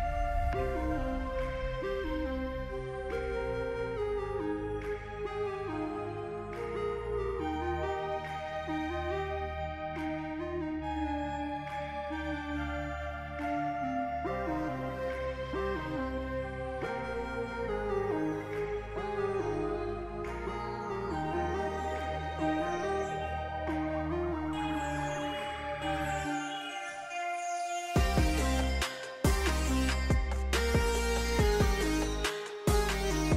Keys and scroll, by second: 1.0 f, 3.4-5.1 typing, 10.5 ctrl+a, 10.8-11.6 typing, 15.3 ctrl+c, 15.5 ctrl+v, 28.5-30.4 typing.